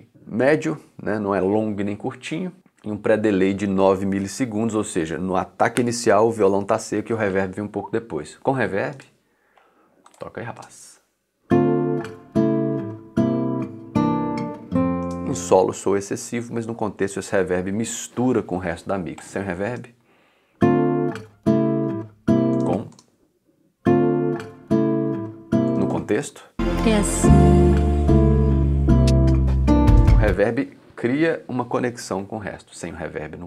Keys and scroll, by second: 10.6 space, 15.0 space, 19.7 space, 22.5 space, 25.7 space, 30.0 space.